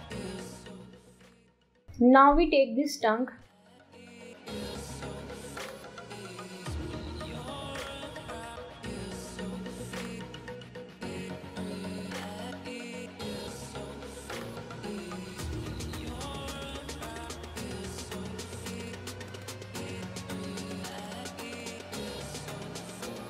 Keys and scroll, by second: 0.2 ctrl+g, 4.4 Delete, 4.7 ctrl+t, 16.4 Delete, 16.5-18.0 typing.